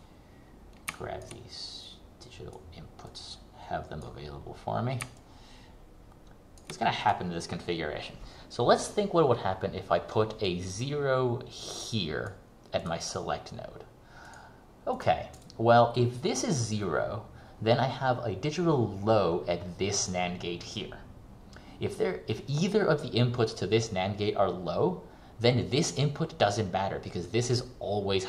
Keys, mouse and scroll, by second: 4.4-5.2 scroll up 1, 5.2 ctrl+click, 7.2 click, 10.6 click.